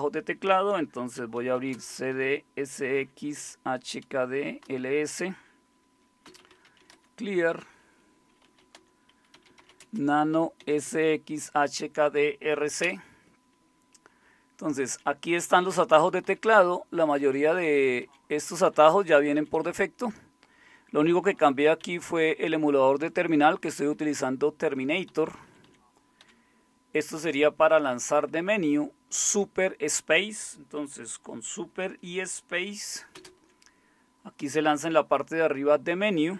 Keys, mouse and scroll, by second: 1.1-4.8 typing, 6.0-10.9 typing, 12.8 typing, 14.0-18.7 typing, 17.1-18.0 Up, 18.7 Down, 18.8 Down, 19.0 Down, 19.2 Down, 19.4 Down, 19.6 Down, 21.1 Right, 21.2 Right, 21.4 Right, 21.8 Left, 22.2 Left, 22.9 Right, 23.4-23.7 Right, 24.0 Right, 25.1 Down, 25.7 Down, 26.2 Up, 33.2 super+space.